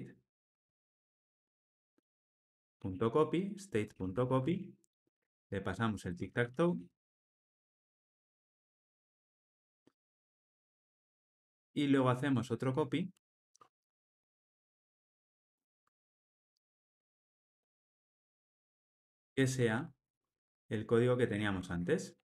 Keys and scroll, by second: 5.0 Return, 15.8 Tab, 18.7 alt+shift+Left.